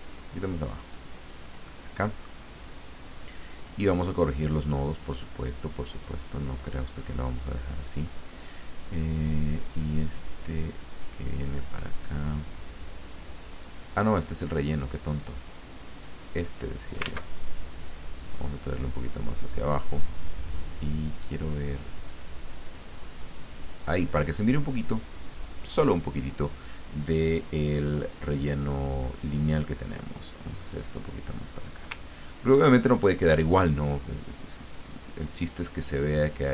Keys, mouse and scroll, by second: 1.6 middle click, 3.5 click, 5.0-8.3 drag, 9.1 click, 11.0-12.4 drag, 14.2-15.5 drag, 16.2 click, 17.0 ctrl+z, 17.5-19.7 ctrl+drag, 20.6-26.1 drag, 29.4-31.9 drag, 34.6-36.5 drag.